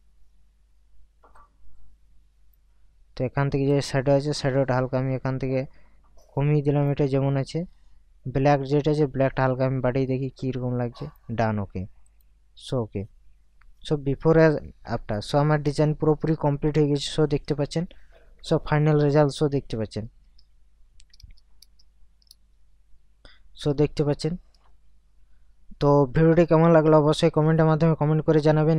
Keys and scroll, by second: 15.1 ctrl+KP_Add, 17.5 ctrl+KP_Subtract, 19.4 ctrl+KP_Add, 20.2 ctrl+KP_Subtract, 21.1 ctrl+KP_Add, 23.7 ctrl+KP_Subtract, 24.7 ctrl+KP_Subtract.